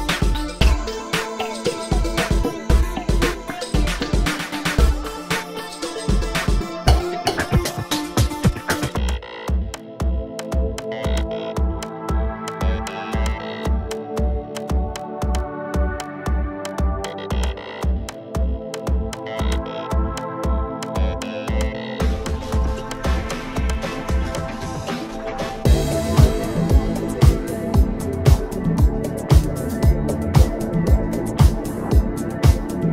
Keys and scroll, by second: 5.0 ctrl+z, 5.7 space, 6.0 p, 13.6 space, 14.4 space, 22.1 space, 28.9 space, 30.0 p, 32.1 space.